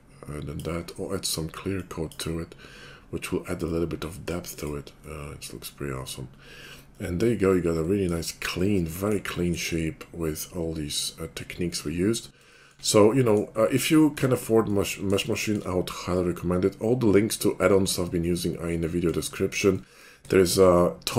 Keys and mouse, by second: 2.0-21.1 drag, 2.0-4.6 right drag.